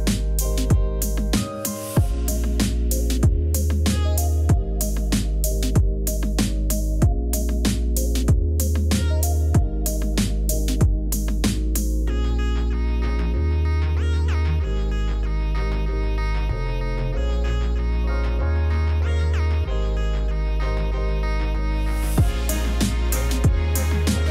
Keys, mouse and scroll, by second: 1.8 ctrl+-, 2.3 ctrl+z, 8.2 Return, 10.7 ctrl+0, 22.7 Down, 23.4 Up, 23.8 Return.